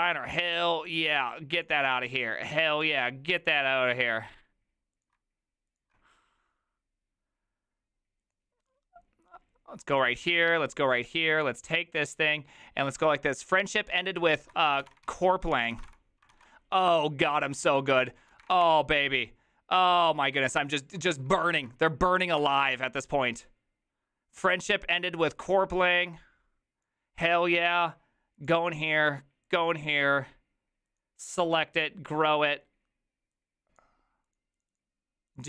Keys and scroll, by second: 14.5-16.4 typing, 16.4 ctrl+a, 18.0-18.7 typing, 21.3-22.0 typing, 22.4 Return.